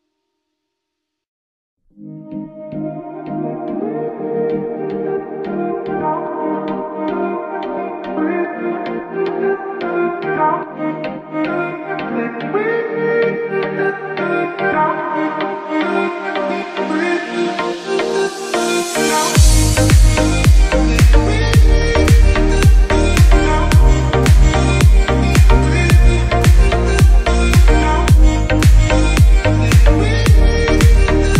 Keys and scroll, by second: 18.6 shift+F2, 19.1 F3, 20.0 alt+c, 20.1 alt+w, 20.4 p, 21.4 F3, 21.9 Escape, 22.4 F2, 26.2 space, 26.6 ctrl+q, 27.7 F10.